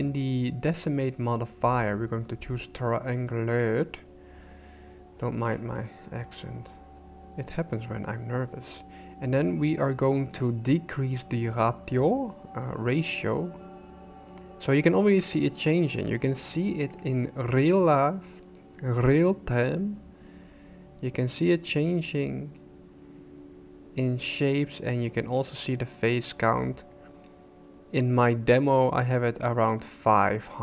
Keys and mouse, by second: 3.6 click, 5.6-17.1 drag, 17.5-30.6 shift+drag.